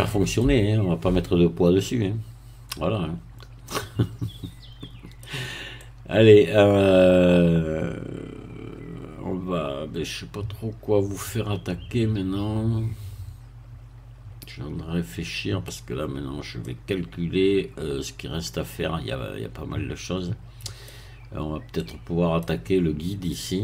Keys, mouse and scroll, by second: 0.7-1.2 shift+scroll up 1, 1.2-5.2 middle drag, 5.2 scroll down 1, 5.7-16.1 middle drag, 16.1-16.6 scroll up 1, 16.6-21.0 middle drag, 21.7 middle click.